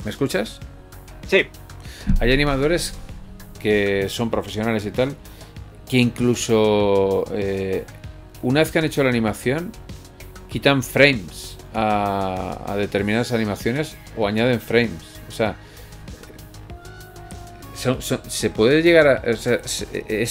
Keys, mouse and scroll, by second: 6.4 click, 7.0 alt+a, 8.5 middle click, 9.5 KP_1, 10.5 shift+middle click, 11.5 middle click, 12.1 scroll up 1, 12.3 scroll down 4, 12.7 middle click, 13.3 scroll up 1, 14.3 shift+middle click.